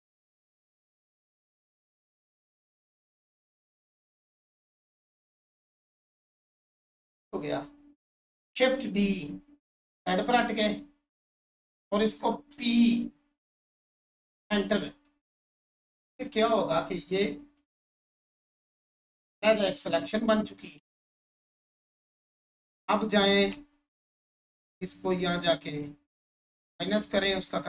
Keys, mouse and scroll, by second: 0.4-5.4 shift+drag, 5.4-9.9 ctrl+drag, 9.9 right click, 11.3 click, 13.5 Return, 16.5 click, 17.9-19.3 alt+drag, 20.4 right click, 22.5 click.